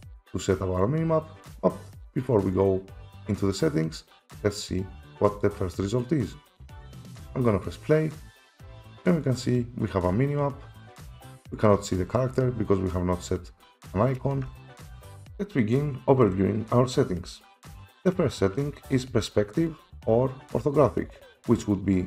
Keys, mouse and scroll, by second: 5.4 click, 6.6 click, 7.7 click, 14.5 F4, 14.5 click, 14.5 right click, 15.0 right click, 19.7 click.